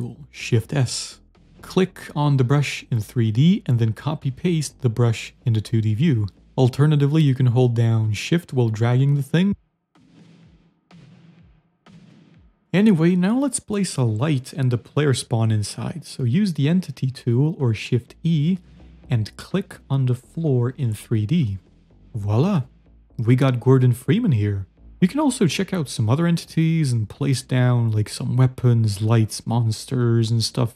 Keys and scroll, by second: 0.4 shift+s, 4.9 ctrl+c, 5.6 v, 11.9-13.4 typing, 18.3 shift+e, 22.9 shift+s, 27.1 z, 27.6 shift+e, 28.8 l.